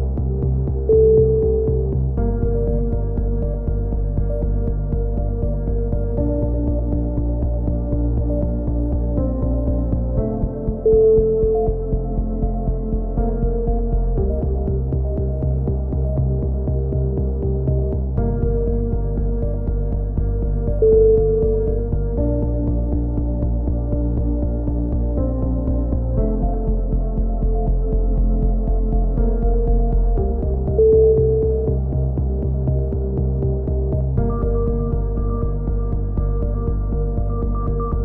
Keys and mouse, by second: 11.0-11.5 drag, 11.5-12.2 right drag, 11.5 shift+s, 13.4 t, 14.9 r, 15.8 s, 16.1 s, 17.4-17.9 drag, 17.9 s, 19.5 Tab, 19.7 Tab, 20.2-21.7 drag, 20.7 a, 22.2-23.6 middle drag, 23.6-24.4 drag, 24.4 e, 24.8-25.4 drag, 26.0 s, 26.7-27.2 drag, 27.4-27.9 drag, 28.1 s, 29.2 z, 31.1 e, 31.6-32.2 drag, 32.5 s, 34.9 a.